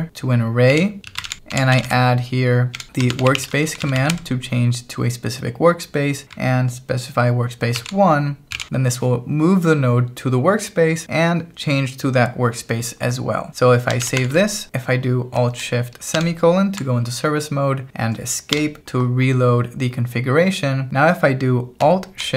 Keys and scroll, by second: 0.0-4.5 typing, 7.8-9.1 typing, 13.8-14.7 typing, 16.2 alt+shift+;, 18.5 Escape.